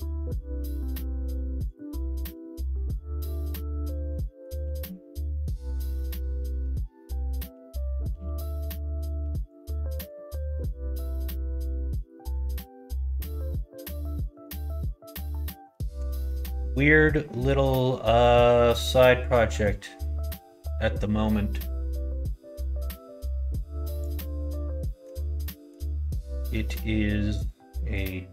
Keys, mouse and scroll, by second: 0.1 middle click, 1.9 middle click, 3.2 middle click, 3.2 x, 4.1 middle click, 4.6 ctrl+z, 6.0 click, 7.5 3, 7.7 click, 8.0 x, 9.2 2, 9.5 click, 10.6 ctrl+b, 12.9 click, 13.7 middle click, 14.1 shift+middle click, 15.1 middle click, 15.5 shift+middle click, 16.0 middle click, 16.5 middle click, 17.3 middle click, 17.7 middle click, 18.2 middle click, 24.0 click, 24.9 middle click, 25.5 middle click, 26.2 middle click, 26.6 middle click.